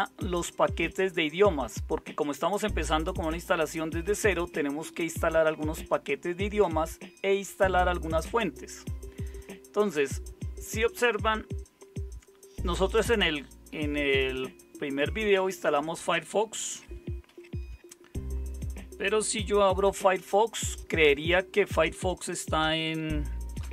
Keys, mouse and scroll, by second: 17.2 super+0, 19.8 super+0, 23.6 super+space.